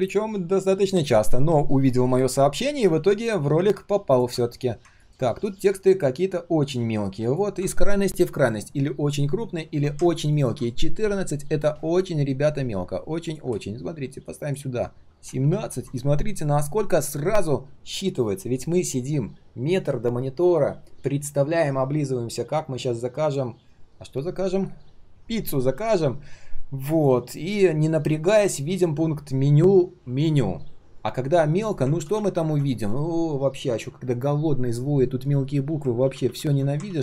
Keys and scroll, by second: 31.9 ctrl+z, 32.1 ctrl+z, 36.0 ctrl+z, 36.2 ctrl+z, 36.8 ctrl+z.